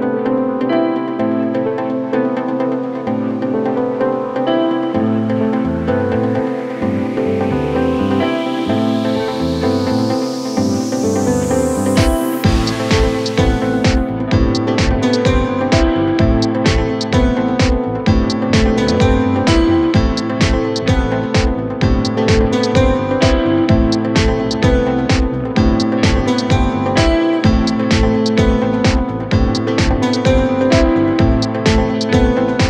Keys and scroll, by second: 29.6 shift+F2, 31.0 Escape.